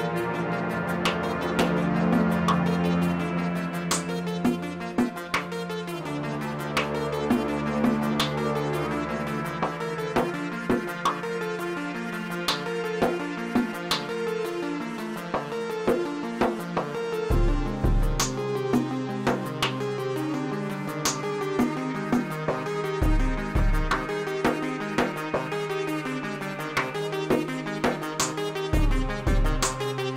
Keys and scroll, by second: 1.7 s, 4.2 g, 7.2 1, 7.5 shift+z, 8.8 s, 11.8 shift+z, 21.2 l, 22.4 3, 26.5 g, 28.4 y.